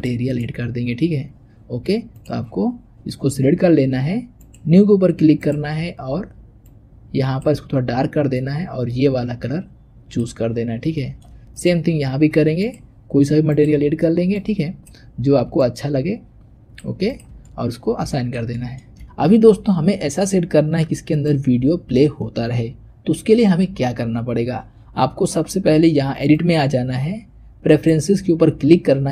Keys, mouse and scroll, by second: 0.2 drag, 2.1 click, 4.3-5.3 drag, 10.9-11.5 shift+middle drag, 11.5 click, 12.5-13.5 drag, 17.0 click, 17.3-18.9 shift+middle drag, 21.0 click, 26.3-29.1 drag.